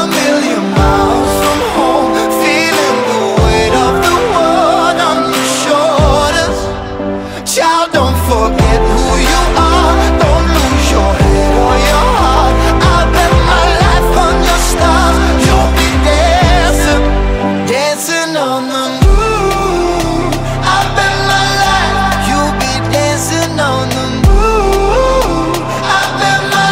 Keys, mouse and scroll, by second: 2.3 click, 2.8 alt+click, 3.8 alt+right click, 4.5-5.2 alt+drag, 5.8 click, 7.8 click, 9.4-10.4 alt+drag, 10.4 n, 10.7 click, 10.8 n, 11.0-11.5 alt+right drag, 11.5 alt+middle click, 11.7 alt+drag, 12.0-12.3 alt+middle drag, 12.3 alt+drag, 12.5-12.9 alt+middle drag, 12.9 alt+drag, 13.1 alt+middle drag, 13.4 alt+drag, 13.6 alt+middle click, 13.8 alt+click, 14.0 alt+middle click, 14.3 alt+drag, 14.5-15.8 alt+middle drag, 15.8 alt+right drag, 16.0-16.4 alt+drag, 16.4 alt+middle drag, 16.7 alt+click, 16.9-17.3 alt+middle drag, 17.3 alt+drag, 17.5 alt+middle drag, 17.7 alt+drag, 17.9 alt+middle drag, 18.1-18.4 alt+drag, 18.4 alt+middle drag, 18.7 alt+drag, 18.9 alt+middle drag, 19.1 alt+drag, 19.3 alt+middle drag, 19.6 alt+right drag, 19.9 alt+middle click, 20.1 alt+right click, 20.4-21.0 alt+middle drag, 21.0-21.5 alt+drag, 21.5 alt+middle click, 21.8 alt+click, 22.3-22.9 alt+middle drag, 22.9 alt+drag, 23.2 alt+middle click, 23.8-24.2 alt+drag, 24.2 alt+middle click, 25.0-25.6 alt+drag, 25.6-26.6 alt+middle drag.